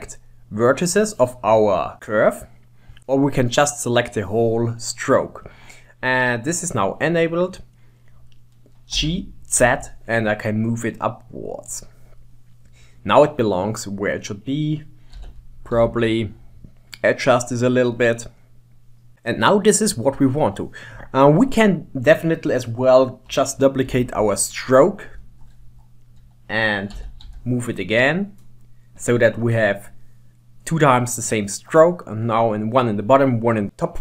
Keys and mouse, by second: 0.0 click, 5.5 click, 6.3-8.1 middle drag, 9.0 middle click, 9.0 g, 12.3-13.7 middle drag, 15.2 g, 16.3-18.0 middle drag, 19.0 middle click, 24.0 shift+d, 27.1 g, 29.6-30.8 middle drag, 31.9 middle click, 33.7 middle click.